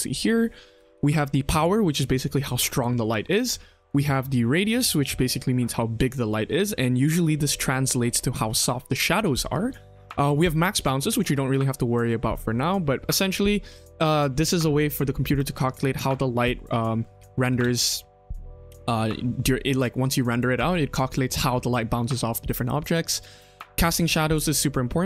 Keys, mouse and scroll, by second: 0.9 ctrl+z, 3.8-5.9 drag, 17.4 space, 23.7 click, 24.3 click.